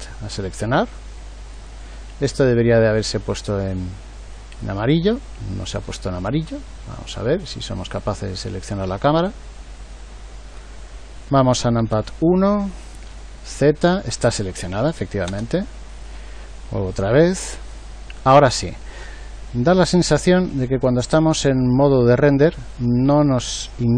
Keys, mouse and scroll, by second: 11.8 KP_1, 13.1 z, 15.3 KP_0, 16.7 z.